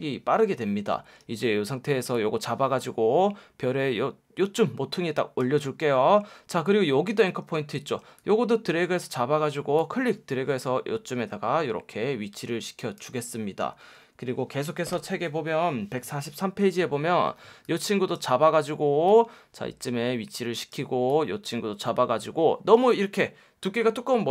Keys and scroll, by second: 1.2 F1, 6.3 F1, 7.7 F1.